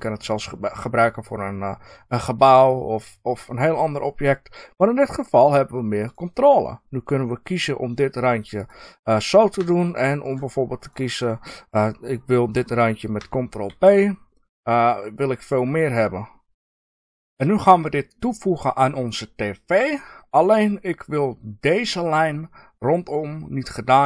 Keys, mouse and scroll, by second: 6.1 click, 8.5 click, 9.6 ctrl+click, 10.2 ctrl+click, 10.7 click, 13.6 ctrl+b, 15.5 click, 15.8-24.0 middle drag.